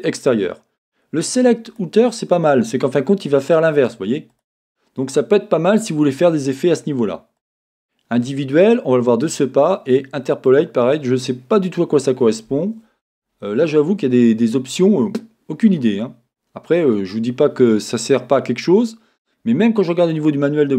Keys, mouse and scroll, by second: 1.7-7.9 drag, 17.7 middle click.